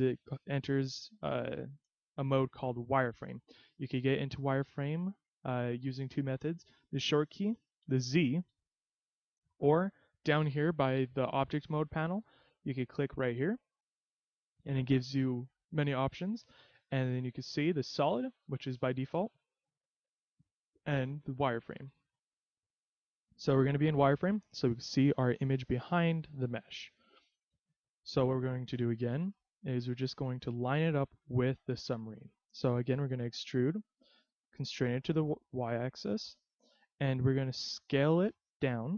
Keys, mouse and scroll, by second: 8.0 z, 8.7 z, 12.6 click, 20.4 click, 21.7 click, 29.6 click, 32.9 e, 36.5 click, 37.5 s.